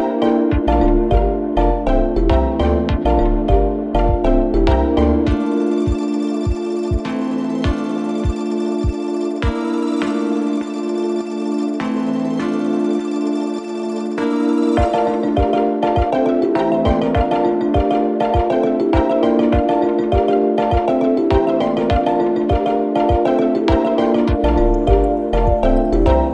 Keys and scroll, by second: 3.2 2, 3.6 4, 5.5 3, 6.1 Delete, 6.9 4, 7.5 3, 7.8 ], 8.0 Delete, 8.7 ctrl+z, 9.3-11.3 typing.